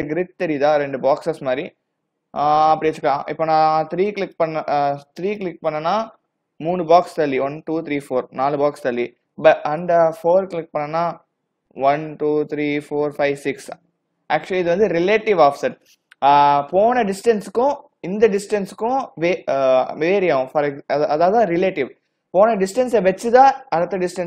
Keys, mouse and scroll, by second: 4.3 click, 5.4 click, 9.9 click.